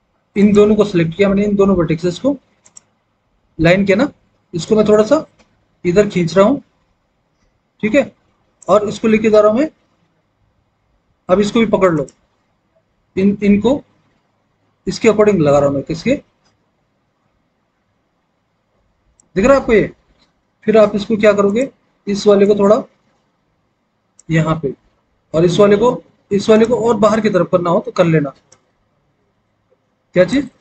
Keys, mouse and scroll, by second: 28.4-30.6 drag.